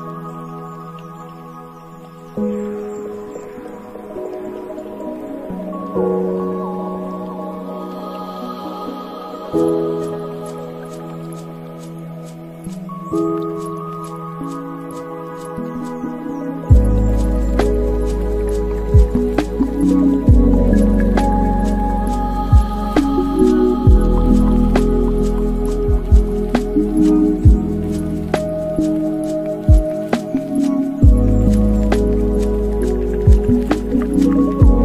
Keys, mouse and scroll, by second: 0.7-1.3 scroll up 5, 1.3-2.5 scroll up 1, 2.5-4.2 scroll up 6, 4.2-5.2 scroll up 5, 5.2-7.3 scroll up 1, 7.3-10.2 drag, 12.1 click, 12.8-15.2 drag, 15.2-15.7 scroll down 2, 16.9 click, 18.8-20.9 drag, 20.9 scroll down 1, 21.7-24.4 drag, 24.4-26.1 scroll down 15, 26.1-26.5 drag, 26.5-27.6 scroll down 3, 27.6-32.9 drag, 32.9 scroll down 3, 33.4-34.2 middle drag, 34.2 scroll up 4, 34.5-34.8 middle drag.